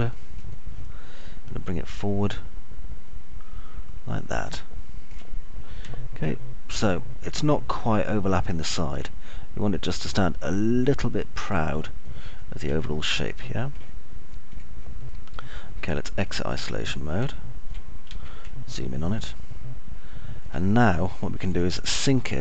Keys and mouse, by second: 0.0 alt+middle click, 0.8 middle click, 3.1-6.0 shift+drag, 6.8-10.0 alt+middle drag, 10.8 click, 13.8-14.8 alt+middle drag, 15.5 click, 18.1 alt+middle click, 19.0 z, 19.5-21.5 alt+middle drag.